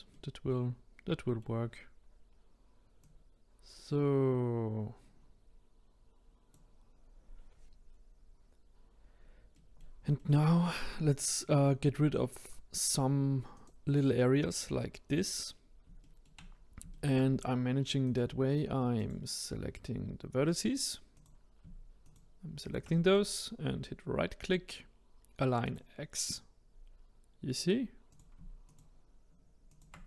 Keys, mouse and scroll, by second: 3.0 click, 9.5-12.4 middle drag, 12.4 click, 13.5 click, 15.4-16.0 scroll up 2, 16.0 shift+middle click, 16.4-16.9 scroll up 2, 16.9-18.0 shift+middle drag, 18.0 click, 19.0 click, 21.1 click, 22.0 shift+click, 22.6 shift+click, 23.0-26.2 right drag, 26.5 scroll up 2, 28.1-28.7 drag, 29.7 shift+click.